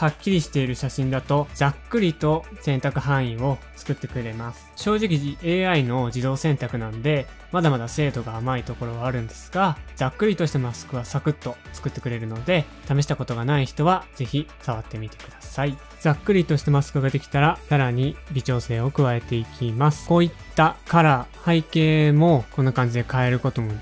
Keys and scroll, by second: 10.2 typing, 11.8 l, 15.2-15.9 typing, 17.3 typing, 18.4 space, 18.9 space, 19.0 space, 19.4 space.